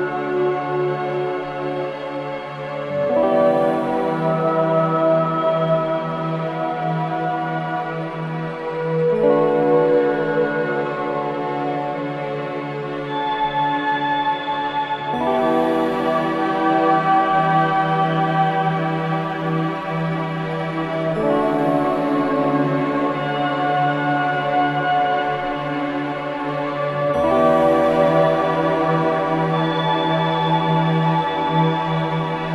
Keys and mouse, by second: 0.8 click, 3.7 Escape, 5.2 click, 6.2-7.4 drag, 7.5-8.9 drag, 9.2 g, 13.0 click, 13.5 click, 15.6 click, 16.3 click, 17.3 shift+click, 18.2 alt+click, 19.5 3, 20.7 typing, 21.9-23.4 drag, 23.7 typing, 25.2 typing, 26.6 click, 28.2 typing, 29.3 click, 30.8 click, 31.4 click, 31.9 click, 32.0 typing.